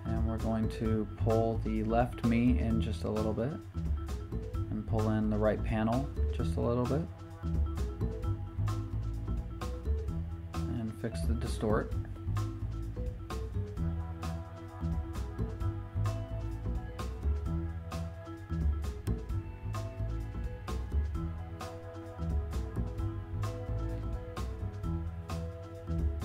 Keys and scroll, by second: 1.4 Return, 4.6 v, 14.5 super+t.